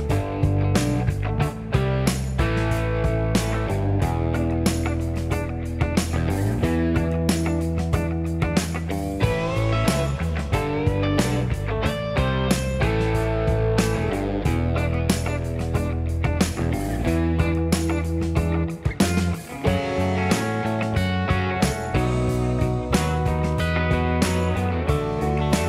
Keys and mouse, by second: 0.4 v, 1.1-2.7 middle drag, 1.5 3, 2.7 ctrl+click, 3.1-10.4 middle drag, 3.4 g, 5.5 1, 5.7 2, 7.9 shift+click, 9.5 g, 10.8-19.4 middle drag, 11.1 k, 12.2 1, 12.5 m, 13.6 k, 15.1 2, 16.1-16.6 f, 17.1 shift+f, 19.4-21.9 middle drag, 20.0-21.5 f, 22.1 alt+middle click, 22.8-25.6 middle drag, 23.1 2, 24.7 e.